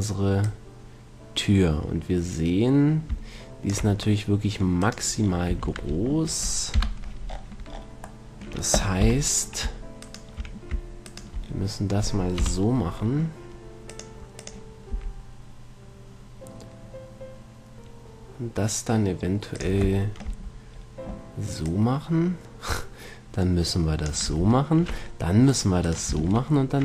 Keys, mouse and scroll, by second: 0.7-2.6 drag, 5.8 a, 6.1 a, 7.1 KP_1, 9.4 z, 10.3 right click, 12.7 right click, 12.7 KP_1, 14.2-15.9 drag, 15.2 s, 20.3-23.7 drag, 24.5 a, 25.8-26.8 right drag, 26.5 ctrl+Tab.